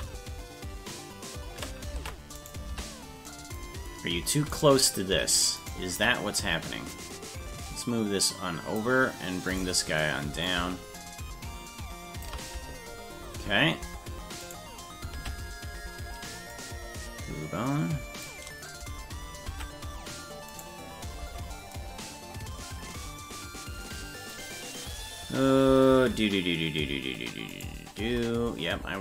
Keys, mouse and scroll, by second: 1.9 ctrl+Tab, 2.4 right click, 2.7 Tab, 4.5 right click, 5.7 shift+right click, 6.9-8.8 drag, 9.5 right click, 10.5-12.3 shift+drag, 13.9 Tab, 14.5 right click, 15.3 ctrl+Tab, 16.6-18.3 drag, 19.6 ctrl+Tab, 20.6 right click, 21.3 Tab, 27.6 shift+right click.